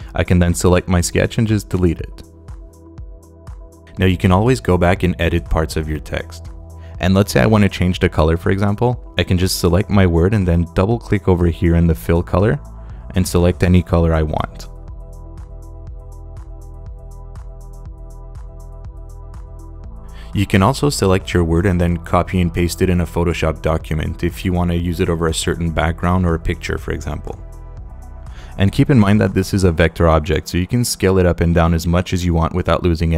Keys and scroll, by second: 1.4 BackSpace.